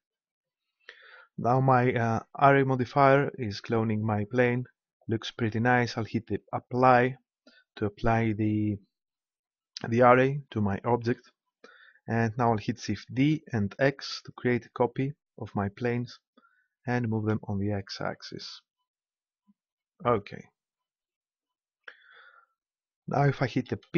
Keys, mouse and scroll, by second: 6.6 click, 6.9-8.3 right drag, 13.1 shift+d, 20.1-21.8 drag, 23.8 p.